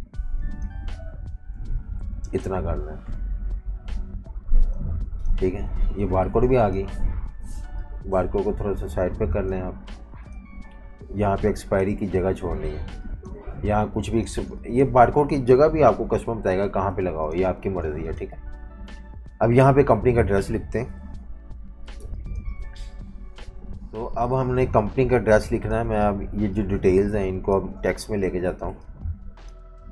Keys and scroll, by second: 1.3-2.5 typing, 6.3 v, 6.4 space, 14.3 v, 14.5 space, 15.5 super+-, 16.9-18.3 typing, 21.0 super+-, 21.2 super+-, 21.9-23.0 typing, 23.3 super+-, 27.6-29.9 typing.